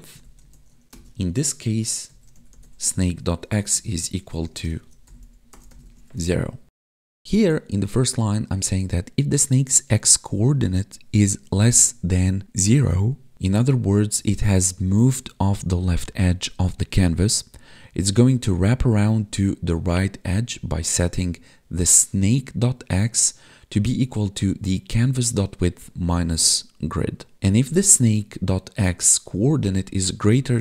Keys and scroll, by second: 0.1 Right, 3.6 space, 3.9 space, 4.5 space, 5.9 ctrl+s.